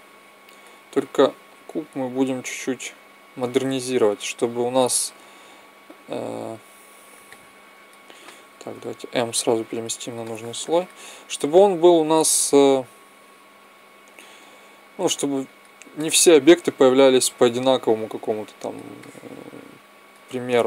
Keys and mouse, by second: 1.4-3.3 drag, 5.7 KP_1, 6.6 z, 8.7 m, 11.9 middle click, 13.4 s, 14.8-15.9 drag, 15.9 middle click, 18.1 click, 18.9-20.4 middle drag.